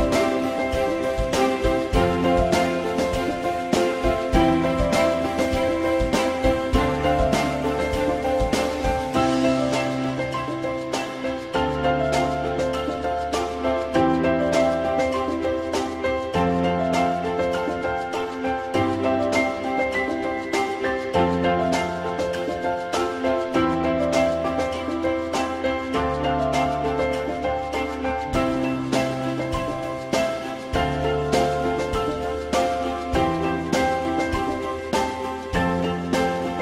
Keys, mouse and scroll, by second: 6.2 click, 10.2 click, 34.5 ctrl+z.